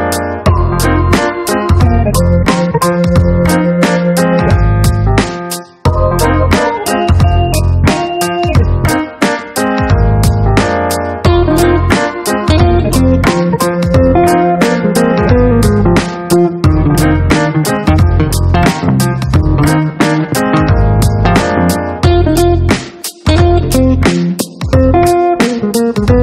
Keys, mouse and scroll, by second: 1.7 click, 2.7 click, 6.7 click, 8.4 click, 10.8 shift+Delete, 11.4 shift+Return, 14.5 click, 15.4 right click, 16.9 click, 18.9 click.